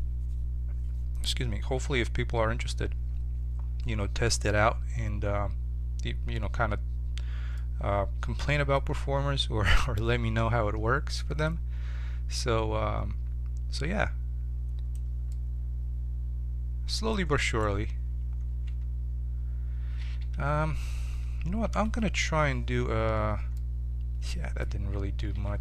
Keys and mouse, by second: 7.5-9.5 middle drag, 11.4-15.3 drag, 15.5-16.7 middle drag, 17.4-18.6 right drag, 18.6 Tab, 19.9 a, 20.1 a, 22.1 ctrl+t, 22.7 Tab, 25.4 Tab.